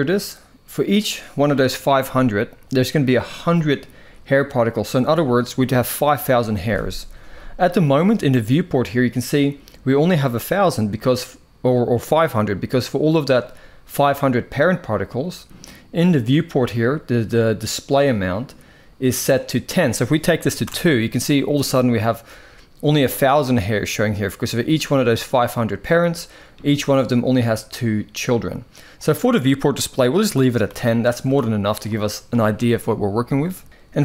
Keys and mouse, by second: 6.1 typing, 17.7 click, 19.5 click, 28.7-31.0 drag.